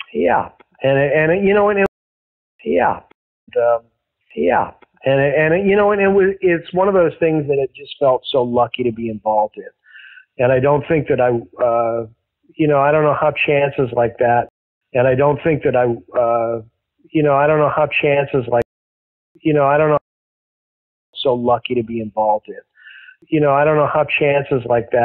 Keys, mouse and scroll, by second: 0.1-1.8 drag, 1.8 space, 2.3 ctrl+shift+Delete, 2.5 space, 3.0 space, 3.3 click, 3.3 space, 5.2 ctrl+s, 6.5 click, 8.4-10.2 drag, 10.6 click, 11.9 click, 12.8 click, 14.4 space, 14.6 click, 14.7 space, 17.4-18.6 drag, 18.5 space, 19.0 ctrl+shift+Delete, 19.3 space, 19.9 space, 20.3 click, 21.0 click, 21.0 space, 24.3 ctrl+s.